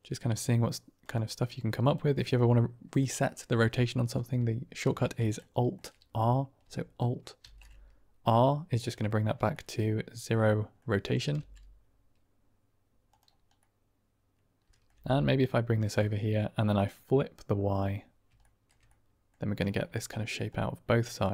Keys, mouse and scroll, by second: 1.2-1.8 drag, 2.1 click, 2.3-2.9 middle drag, 2.9 click, 5.3-5.6 shift+middle drag, 7.7 alt+r, 8.7 drag, 9.4 click, 9.7 middle click, 9.8 click, 9.9-10.7 middle drag, 11.3 g, 13.6 click, 13.7-14.8 middle drag, 15.2 g, 16.7 click, 18.5 shift+click, 18.8-19.3 drag, 19.7 drag, 19.7 middle drag, 19.8 click, 19.9-20.4 middle drag, 20.9 click.